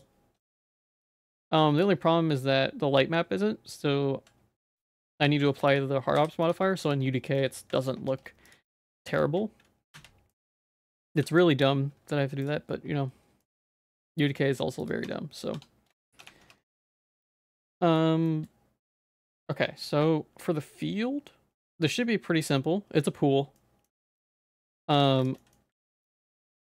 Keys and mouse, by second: 0.4 middle click, 0.8 shift+middle click, 1.0 middle click, 1.3 ctrl+s, 5.1 ctrl+a, 5.5 ctrl+s, 6.2 g, 6.9 shift+click, 7.4 middle click, 7.8 ctrl+s, 8.5 click, 8.8 middle click, 9.1 shift+click, 9.9 /, 10.3 middle click, 11.3 ctrl+s, 13.4 middle click, 14.2 ctrl+s, 14.8 click, 15.0 Tab, 15.5 Tab, 15.9 shift+middle click, 16.2 Tab, 16.4 3, 16.7 middle click, 17.0 shift+middle click, 17.7 middle click, 18.3 shift+middle click, 23.6 middle click, 24.3 Tab, 24.6 middle click, 25.0 ctrl+s, 25.4 middle click, 25.7 ctrl+s.